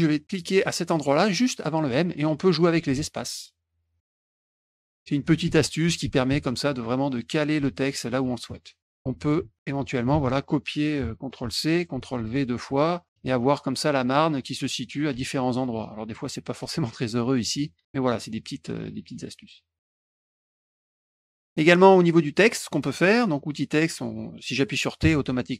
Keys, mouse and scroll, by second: 0.9 click, 2.7 space, 2.9 space, 5.4 space, 6.0 space, 6.2 space, 7.5 space, 8.4 ctrl+z, 10.1 ctrl+a, 11.4 ctrl+c, 12.0 ctrl+v, 12.1 ctrl+v, 13.1 space, 15.1 space, 16.6 space, 17.8 ctrl+z, 21.0 ctrl+shift+z, 21.6 click, 25.0 t.